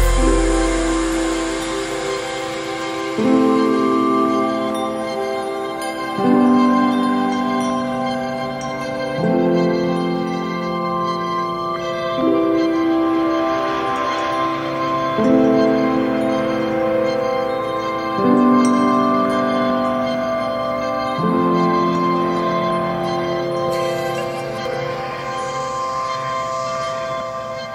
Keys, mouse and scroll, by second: 1.6 click, 2.2 right click, 2.9 right click, 4.4 right click, 5.7 click, 9.4-11.3 scroll down 1, 11.3 click, 12.3 right click, 13.5-13.9 scroll up 1, 14.5 scroll down 1, 15.2 right click, 18.8 click, 19.8 scroll down 1, 22.1 click, 22.4-22.7 scroll down 1, 23.1 right click, 24.1 right click, 25.4 click, 26.1 right click.